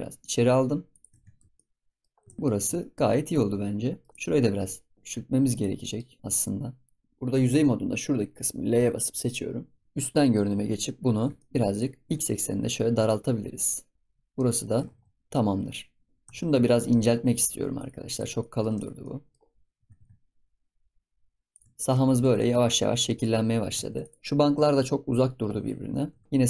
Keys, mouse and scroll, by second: 1.5 scroll down 2, 1.5 middle click, 2.1 scroll up 5, 2.2 ctrl+s, 2.4-4.1 middle drag, 4.1 click, 4.6 click, 4.9 Tab, 5.5 click, 5.8 middle click, 6.1 scroll up 3, 6.2-7.3 middle drag, 9.8 s, 10.2 KP_7, 11.1 scroll down 2, 11.3 shift+middle click, 11.6 click, 12.1 s, 13.9 scroll up 5, 14.1 scroll down 2, 14.3-14.8 middle drag, 14.8 ctrl+s, 14.9-15.3 scroll up 1, 15.3-16.1 middle drag, 16.1 scroll down 1, 16.2 Tab, 16.3 scroll up 2, 16.6-17.7 shift+middle drag, 17.7 click, 18.3 middle click, 18.7 click, 19.0 middle click, 19.7 g, 21.6 Tab, 21.7 shift+middle drag, 21.9 scroll down 1, 22.2 ctrl+s, 22.3 middle click, 22.6-23.0 scroll up 6, 23.0 middle click, 23.4-23.8 scroll down 4, 23.8 ctrl+s, 24.0 click, 24.4 KP_7, 26.0 g.